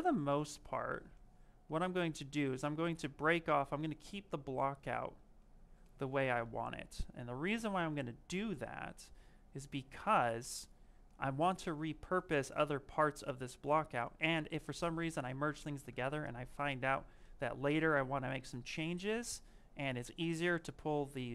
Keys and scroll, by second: 3.3 s.